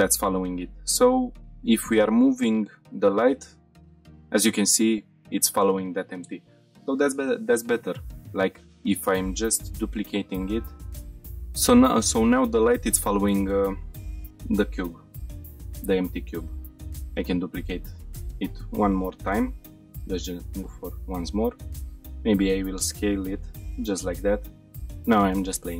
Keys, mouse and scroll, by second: 0.4 click, 1.3 g, 5.5 click, 7.2 scroll down 1, 7.6-7.9 shift+middle drag, 8.1 middle click, 8.5-8.9 drag, 9.8 shift+d, 10.7 click, 11.0 F5, 11.6-12.0 shift+middle drag, 12.1-12.6 middle drag, 12.8 shift+middle click, 13.2-13.6 middle drag, 14.4 middle click, 15.3-15.7 middle drag, 16.0 shift+middle click, 16.3 middle click, 16.8 shift+d, 18.2 click, 18.4-19.1 middle drag, 19.7 g, 20.0 x, 20.6-20.9 shift+middle drag, 20.6 click, 21.1-21.7 middle drag, 22.0 s, 22.8 click, 23.4 g, 23.6 z, 24.2 click, 24.5 shift+middle drag, 24.9 middle click.